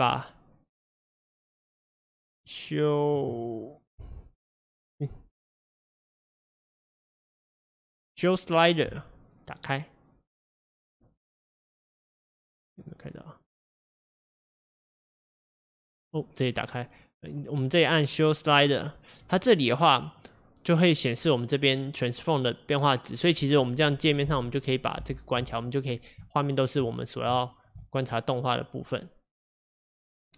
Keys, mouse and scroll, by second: 24.2 middle click, 24.4 n, 26.3-26.9 shift+middle drag, 26.9-27.4 scroll up 1, 27.4-30.3 shift+middle drag.